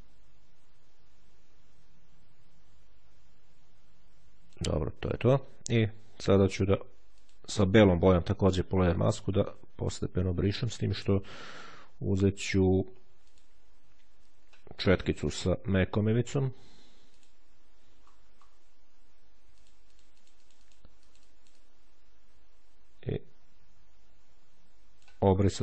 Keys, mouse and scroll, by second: 7.0 click, 9.0-10.6 drag, 12.0 click, 13.0 click, 14.6-16.3 scroll down 1, 16.8 click, 17.8-18.7 ctrl+scroll up 2, 19.4-21.8 drag, 25.2-25.6 scroll up 1.